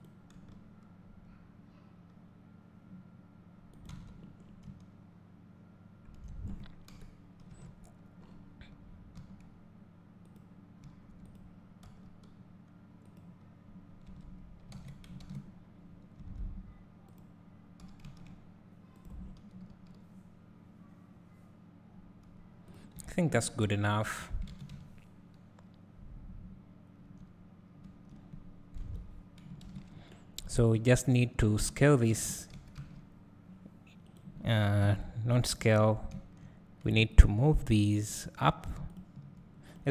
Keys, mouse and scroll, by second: 2.8 g, 3.9 Tab, 4.4 scroll down 2, 4.7 `, 6.9 KP_7, 7.5 Tab, 8.3-9.2 scroll up 1, 9.2 s, 10.4 click, 11.9 g, 13.5 click, 14.1 Tab, 14.8 alt+a, 15.8 scroll up 1, 16.2 Tab, 17.1 click, 17.9 g, 23.1 Tab, 23.3 scroll down 1, 23.5 scroll up 1, 24.2 scroll down 1, 24.7 `, 28.8 KP_7, 29.9 scroll down 1, 30.5 click, 30.7 `, 32.5 s, 34.2 right click, 34.8 KP_1, 35.6 scroll up 1, 36.1 `, 37.2 shift+click, 38.2 click, 39.7 click.